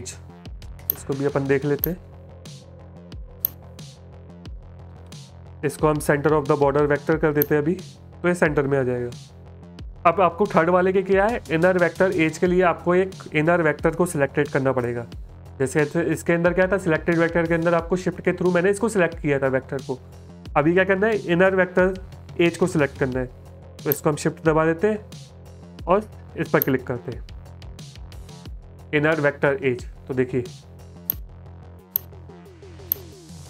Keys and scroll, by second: 29.9 space, 30.8 space.